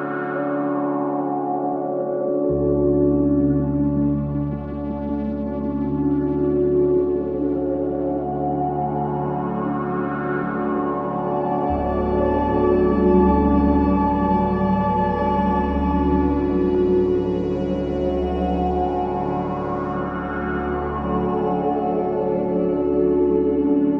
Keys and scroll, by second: 1.0 4, 5.9 2, 16.7 ctrl+z.